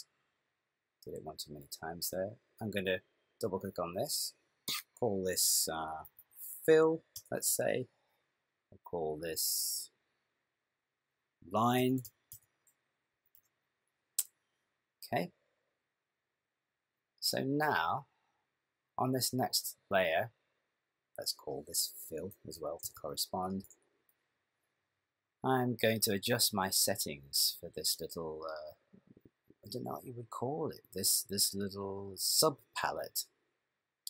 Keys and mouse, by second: 1.2 click, 2.8 click, 3.0 click, 3.5 click, 3.6 click, 6.2 click, 9.5 click, 10.5 click, 10.6 click, 18.3 click, 21.1 click, 21.2 click, 23.0 l, 26.2 click, 32.9 click.